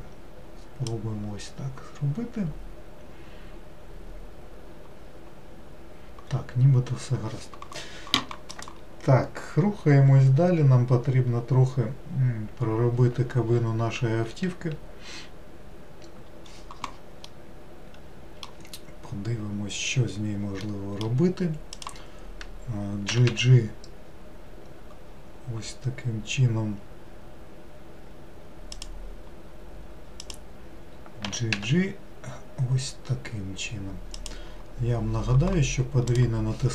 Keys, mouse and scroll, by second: 17.4-20.4 middle drag, 20.7-21.8 middle drag, 21.8 click, 23.2 g, 30.3 click, 31.3 g.